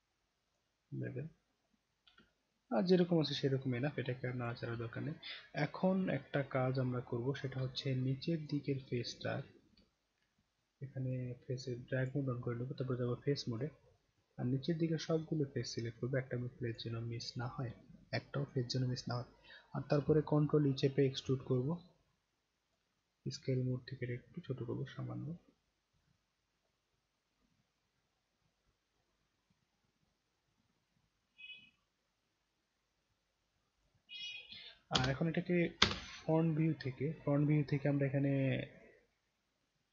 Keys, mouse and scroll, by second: 0.5 click, 2.3-4.5 alt+drag, 5.0-6.7 right drag, 7.7 alt+click, 8.7 alt+middle click, 9.9 alt+middle click, 11.1 click, 12.0 click, 12.6-13.6 right drag, 14.2-16.7 drag, 21.0 ctrl+e, 22.7 click, 24.1 click, 34.9 space, 35.8 space, 38.7 click.